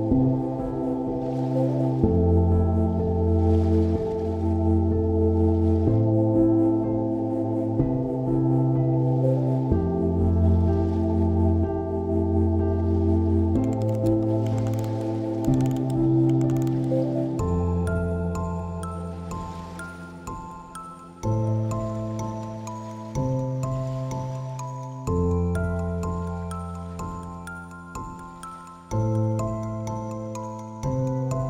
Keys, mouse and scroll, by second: 16.4 right click.